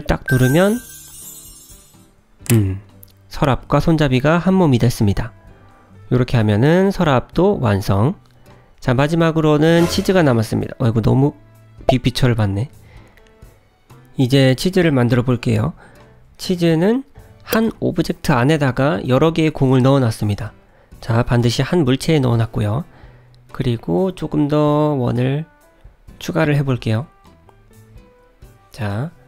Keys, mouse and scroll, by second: 0.1 click, 0.8 click, 0.9 shift+click, 2.3 g, 4.8 click, 5.1 middle click, 8.1 shift+middle click, 9.2 click, 9.7 KP_Decimal, 11.2 click, 11.7 KP_Decimal, 12.4-12.8 scroll down 9, 12.7 middle click, 13.7 shift+middle click, 14.1 middle click, 14.4 shift+middle click, 15.6 click, 16.4 KP_Decimal, 17.4 middle click, 17.7-18.5 scroll down 2, 18.5 click, 19.0 click, 19.5 Tab, 20.0 click, 22.3 l, 23.5 shift+d, 25.0 g, 26.3 shift+d, 28.2 Tab, 28.8 click.